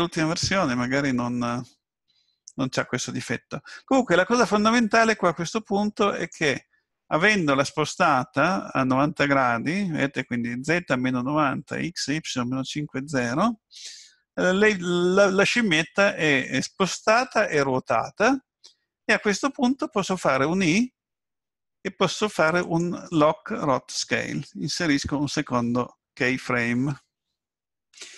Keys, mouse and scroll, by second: 6.2 click, 22.6 i.